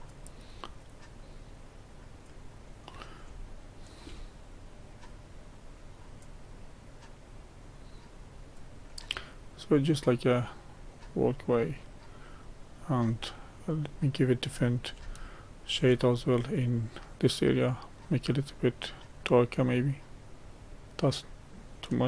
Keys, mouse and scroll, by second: 2.6-3.4 scroll down 2, 3.4-4.6 shift+middle drag, 4.6-9.1 drag, 9.1-10.4 middle drag, 10.4-11.0 scroll up 1, 11.3-12.0 scroll up 2, 12.0 middle click, 13.0-13.6 scroll down 1, 13.6 middle click, 14.4-15.0 scroll down 1, 15.0-16.3 shift+middle drag, 16.3-16.8 scroll up 1, 19.0-21.2 drag, 21.2-22.0 scroll up 1.